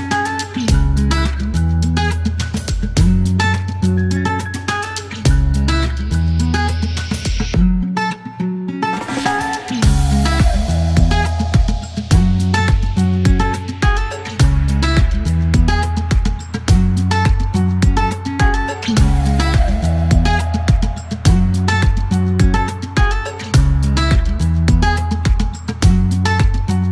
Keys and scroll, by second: 2.6 F3, 4.3 F1, 7.5 r, 9.5 e, 12.4 KP_1, 12.7 KP_0.